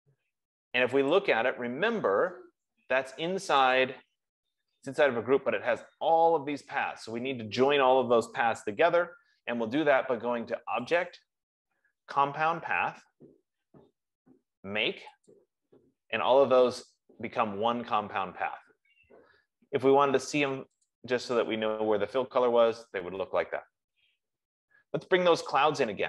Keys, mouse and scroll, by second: 1.6 click, 4.0 click, 11.5 click, 15.8 click, 21.2 click, 22.2 F15.